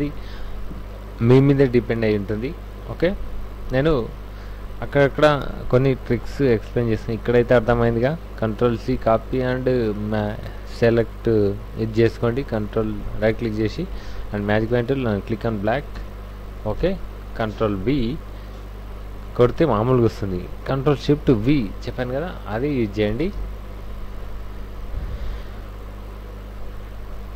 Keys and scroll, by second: 7.7 ctrl+a, 7.9 ctrl+c, 8.0 ctrl+w, 13.9 w, 15.3 ctrl+shift+v, 15.9 ctrl+shift+v, 16.8 alt+Tab, 23.4 alt+Tab.